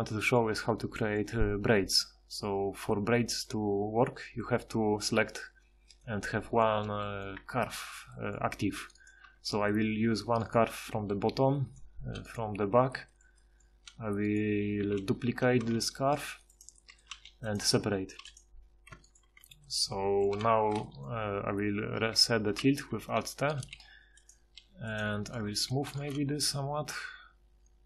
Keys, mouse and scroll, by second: 6.1 middle click, 7.3-8.3 middle drag, 8.9 right click, 9.3 Tab, 11.0 4, 12.6 4, 14.8 a, 15.3 4, 15.8 shift+d, 17.1 g, 18.2 p, 18.3 p, 18.9 Tab, 19.3 Tab, 19.9 a, 20.0 a, 23.0 alt+t, 23.7 g, 24.6 r, 25.6 ctrl+shift+h.